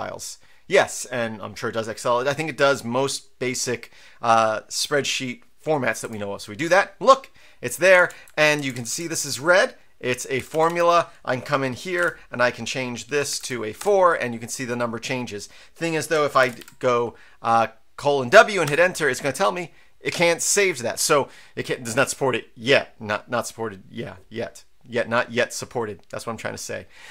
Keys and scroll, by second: 6.0 Return, 8.0 Down, 8.1 Right, 8.5 Down, 8.7 Down, 8.9 Down, 10.4 Up, 10.5 Up, 10.7 Up, 11.7-13.4 typing, 13.3 Delete, 13.8 Return, 16.2-17.1 typing, 18.6 Return.